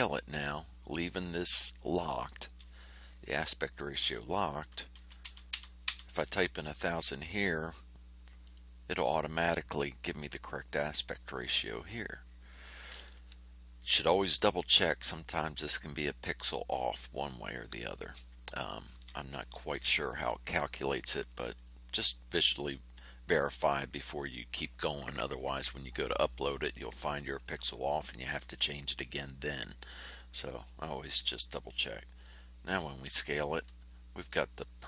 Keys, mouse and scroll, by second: 3.7 click, 4.9 KP_1, 5.2 KP_0, 8.4 click, 32.2 click.